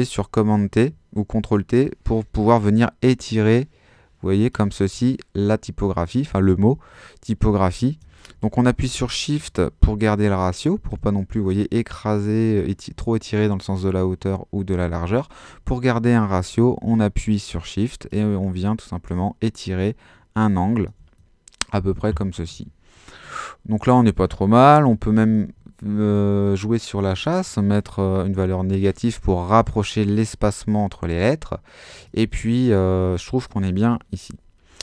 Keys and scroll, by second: 8.5 shift+super+z, 15.0 super+z, 22.5 Page_Up, 24.9-25.7 typing, 28.4 Return.